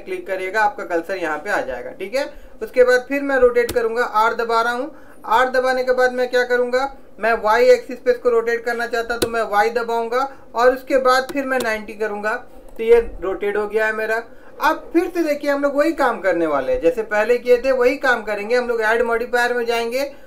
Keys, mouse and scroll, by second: 3.9 r, 19.2 click.